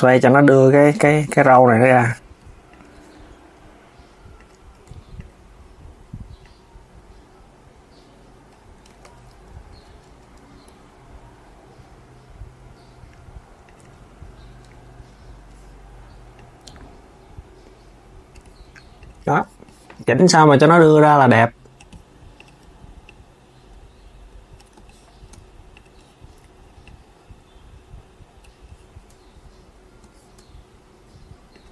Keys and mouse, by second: 0.6 KP_3, 1.2 click, 2.4 click, 4.1 click, 4.4 Tab, 4.9 click, 6.1 click, 8.6 z, 9.0 KP_3, 10.4 r, 13.5 KP_3, 14.4 KP_3, 16.0 click, 18.7 click, 20.3 click, 22.0 click, 22.7 click, 25.4 click, 26.5 click, 31.2 click.